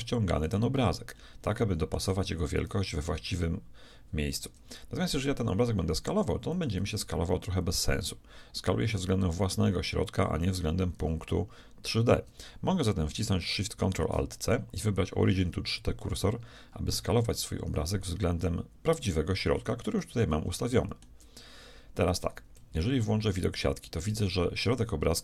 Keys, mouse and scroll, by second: 0.8-1.9 middle drag, 2.8 g, 6.8 s, 13.8 ctrl+alt+shift+c, 17.8 s, 19.9-22.6 middle drag, 22.6 z.